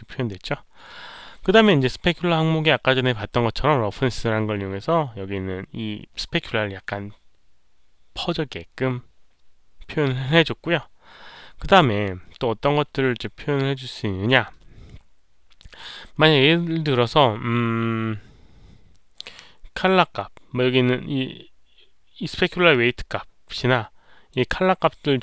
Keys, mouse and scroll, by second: 2.3 middle click, 2.3 click, 17.1 middle click, 17.5-22.6 middle drag, 22.6-24.2 drag, 24.8-25.2 drag.